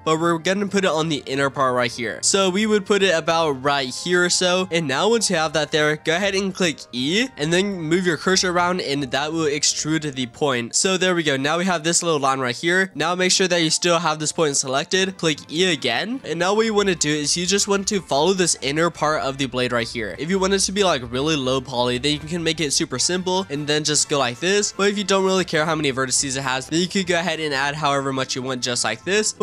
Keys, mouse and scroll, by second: 2.2 g, 6.8 e, 12.9 click, 13.4 click, 14.6-15.4 shift+middle drag, 15.4 e, 16.2-17.2 shift+middle drag, 17.2 e, 18.9 e, 20.1 shift+middle click, 20.2-20.7 scroll up 3, 20.7 shift+middle click, 21.3-22.0 scroll up 3, 22.0-22.6 scroll down 3, 22.7-23.1 scroll up 2, 23.1-23.4 scroll down 1, 23.4 e, 25.1 ctrl+z, 25.5-26.1 scroll up 2, 26.1 e, 27.1 e, 28.1 e, 28.8 e.